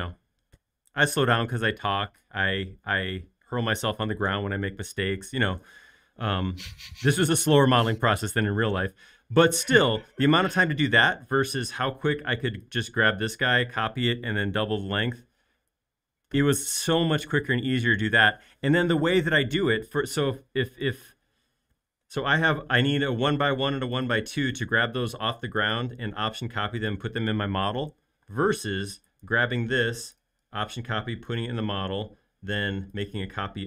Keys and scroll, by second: 25.0 shift+m, 28.2 space, 29.6 m, 31.8 space, 32.6 m.